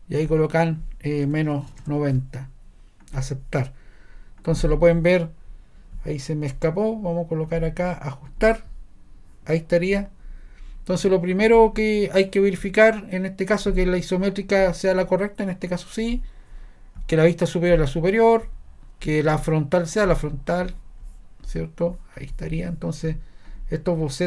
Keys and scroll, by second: 1.0-2.3 typing.